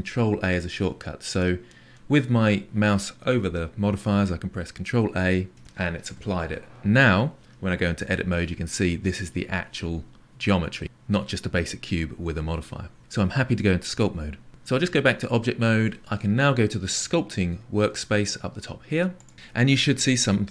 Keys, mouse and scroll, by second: 5.5 ctrl+a, 8.0 Tab, 19.2 click.